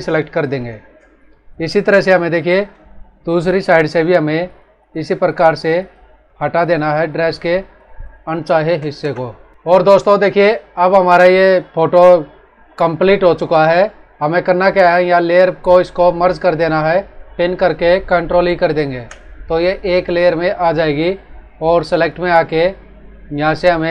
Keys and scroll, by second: 0.3 ctrl+d, 0.9 space, 8.9 ctrl+Return, 9.5 ctrl+-, 18.8 ctrl+e.